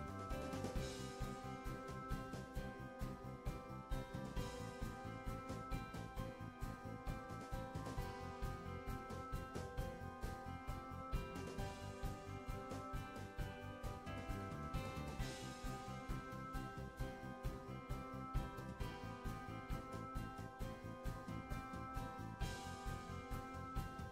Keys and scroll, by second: 1.3 Right, 15.8 Return.